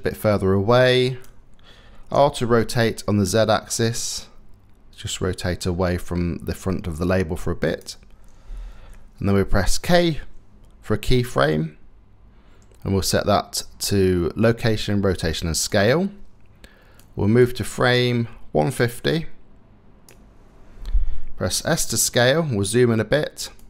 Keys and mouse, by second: 1.8 r, 2.6 middle click, 9.5 k, 16.9-20.0 drag, 21.2 s.